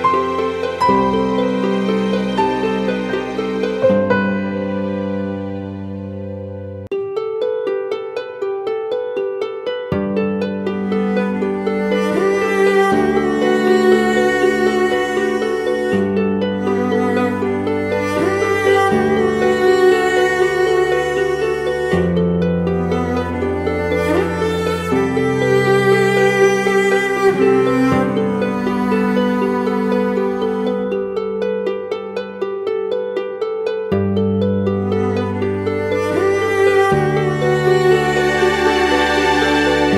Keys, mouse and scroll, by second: 5.9 double click, 8.4-9.6 typing, 13.0 ctrl+t, 17.2 double click, 23.6 double click, 24.8 right click.